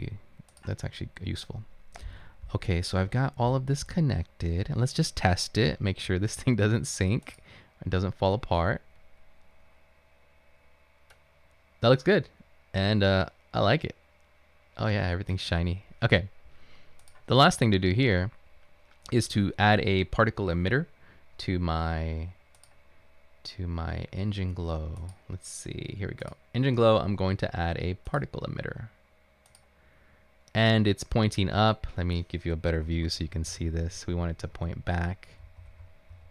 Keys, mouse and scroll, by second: 31.9-33.3 right drag, 33.0-36.1 typing.